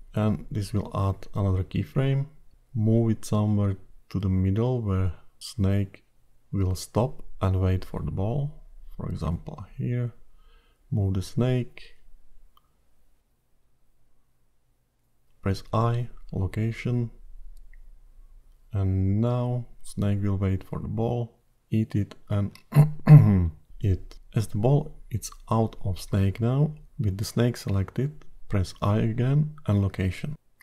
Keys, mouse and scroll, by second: 2.5 click, 8.1 click, 9.8 click, 11.1 g, 20.4 click.